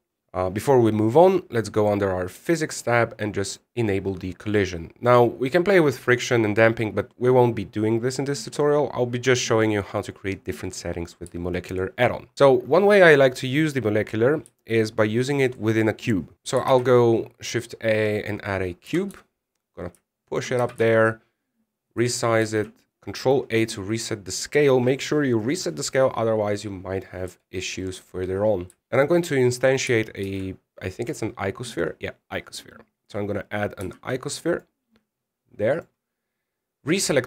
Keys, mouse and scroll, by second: 0.0 middle click, 0.5 KP_1, 2.5 click, 4.2 click, 12.3 shift+middle click, 16.3 shift+a, 17.4 shift+a, 19.6 g, 21.3 s, 23.2 ctrl+a, 24.3 middle click, 28.0 KP_1, 31.0 shift+a, 34.6 g, 36.5 right click.